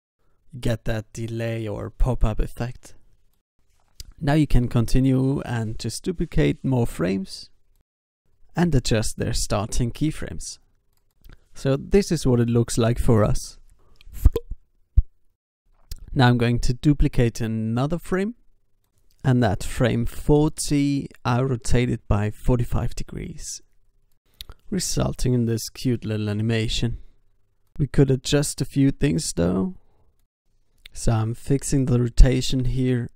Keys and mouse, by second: 1.5 alt+a, 2.5 alt+a, 4.3 shift+d, 5.5 g, 6.7 click, 7.0 alt+a, 7.8 alt+a, 9.1 shift+d, 10.2 g, 11.6 alt+a, 15.5 alt+a, 19.2 r, 19.7 r, 20.8 r, 22.5 i, 23.9 alt+a, 25.8 alt+a, 26.6 alt+a, 28.2 alt+a, 31.8 n.